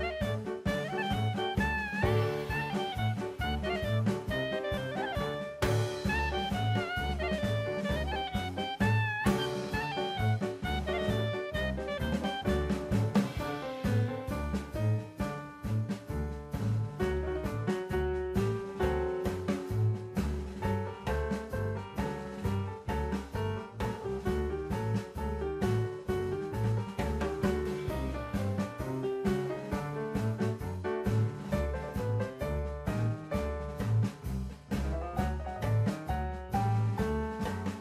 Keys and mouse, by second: 1.2 1, 3.4-4.4 drag, 6.7 shift+v, 8.4 click, 10.7 click, 11.3 shift+v, 12.6 click, 13.2 click, 13.4 shift+v, 14.8 click, 15.4 click, 15.7 shift+v, 17.2 click, 17.8 click, 18.3 shift+v, 19.1 click, 19.5-20.2 drag, 20.3 shift+v, 21.1 click, 23.8 3, 25.4-27.3 drag, 28.8-30.2 drag, 32.6 Tab, 33.6 alt+z, 34.0 right click, 35.4-36.2 drag, 36.9 click, 37.4 Tab.